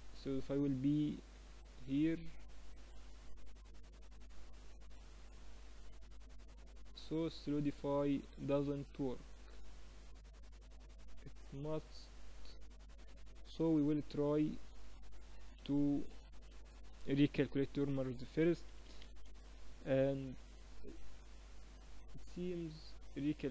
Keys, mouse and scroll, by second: 14.3-16.0 drag, 15.1 Tab, 15.4 a, 15.6 a, 16.0 a, 17.0 ctrl+n, 17.6 ctrl+n, 17.9 ctrl+n, 18.2 ctrl+n, 18.4 ctrl+n, 18.8 ctrl+n, 18.8 Tab, 20.4 middle click, 20.7-23.3 drag, 21.7 Tab, 23.3 ctrl+n.